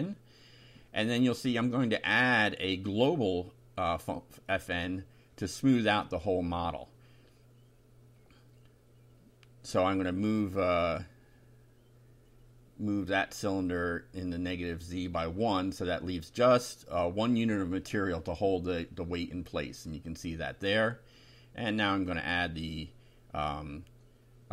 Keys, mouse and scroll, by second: 0.0-0.4 typing, 1.7 F5, 3.4 Left, 6.8 -, 9.9 Delete, 10.4 1, 11.3 F5, 13.5-14.1 scroll up 4, 14.3 click, 14.9 shift+right click, 16.4 click, 17.1 click, 18.3 right click, 19.4-20.7 drag, 21.9 click, 23.4 click.